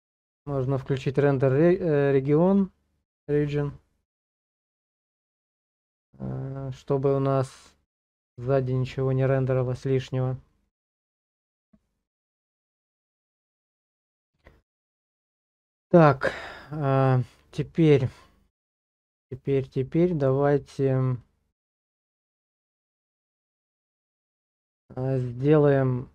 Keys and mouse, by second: 19.7 middle click, 21.2-24.0 middle drag, 24.4 shift+middle click.